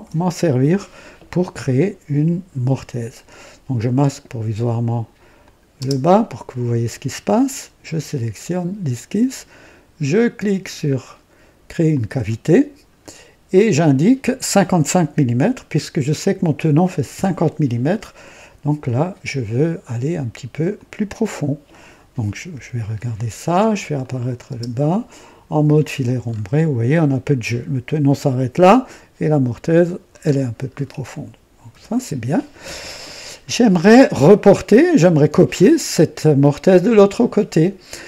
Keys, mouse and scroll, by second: 0.0 &, 5.3 click, 5.8 space, 7.5 click, 11.9 click, 15.7 KP_5, 17.1 KP_5, 20.7 click, 22.5 KP_2, 23.9 click, 24.4 space, 24.7 space, 25.6 &, 26.2 scroll up 1, 30.2-31.0 scroll down 3, 31.7 &, 33.7-34.6 drag, 34.7 right click.